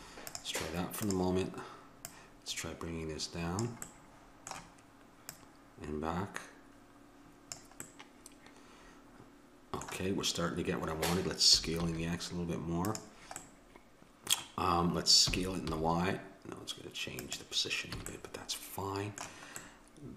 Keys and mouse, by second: 1.1 click, 3.1 click, 4.0-5.3 middle drag, 5.3-7.2 drag, 7.9-8.9 middle drag, 11.6 s, 13.4-15.1 drag, 15.3 s, 18.0 a.